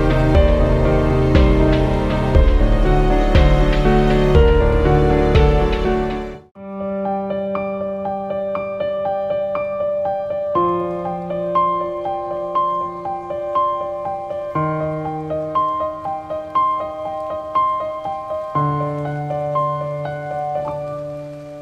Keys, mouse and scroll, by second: 0.1 click, 3.9-12.7 drag, 19.1 click.